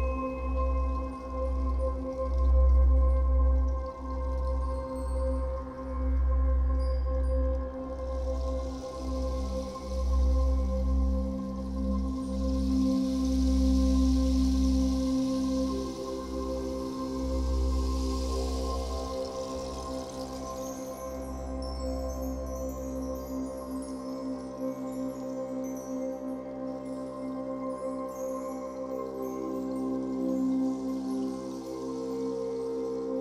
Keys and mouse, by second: 0.0-2.0 alt+shift+drag, 3.0-3.8 typing, 3.3 click, 5.2 space, 7.9 click, 8.8-11.5 drag, 13.1 click, 14.4 ctrl+s, 16.6 i, 18.5 click, 19.5 click, 20.3 click, 21.7 Left, 22.6 click, 23.7 i, 24.2 click, 25.2 Escape, 26.4 click, 27.2 click, 28.0 0, 28.3 Return, 28.9 i, 30.7 click, 32.4 click.